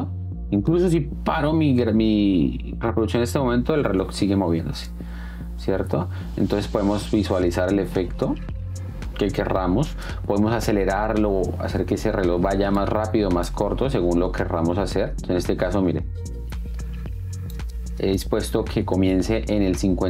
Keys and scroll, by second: 4.9 space, 17.7 space.